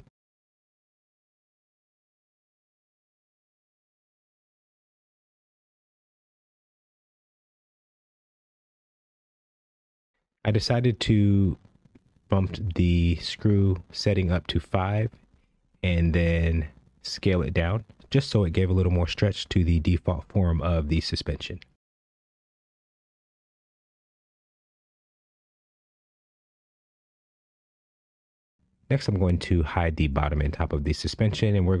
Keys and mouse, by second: 1.5 Tab, 2.4-2.8 shift+middle drag, 5.9-7.0 middle drag, 8.2-9.4 drag, 9.7 click, 12.6-12.9 middle drag, 15.1 click, 15.6 click, 16.0 click, 17.7 click, 18.3-18.6 middle drag, 19.4 KP_1, 20.9-21.3 shift+middle drag, 23.2 s, 25.3 KP_1, 27.5-30.5 drag.